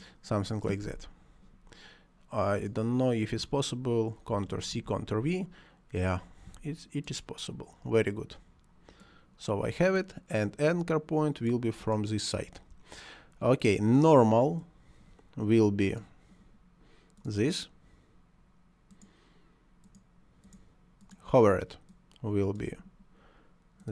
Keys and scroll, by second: 4.3 ctrl+c, 4.7 ctrl+v.